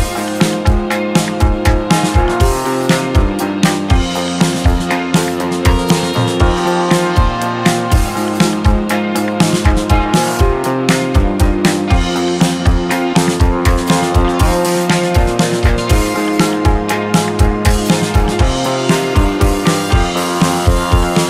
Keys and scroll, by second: 6.1 KP_0, 6.3 KP_0, 6.6 Return, 18.3 2.